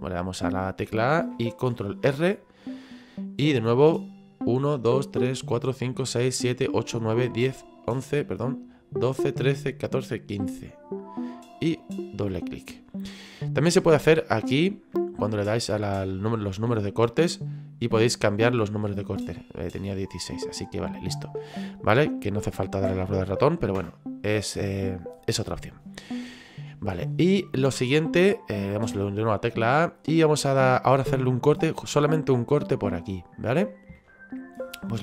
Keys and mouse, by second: 11.6 click, 14.4 click, 17.3 click, 25.3 click, 26.2 middle click, 27.5 click, 29.4 middle click.